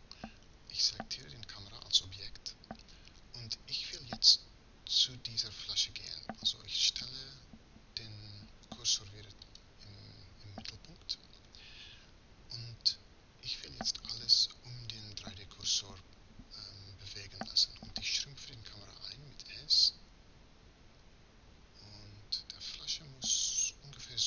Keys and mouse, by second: 6.8 shift+s.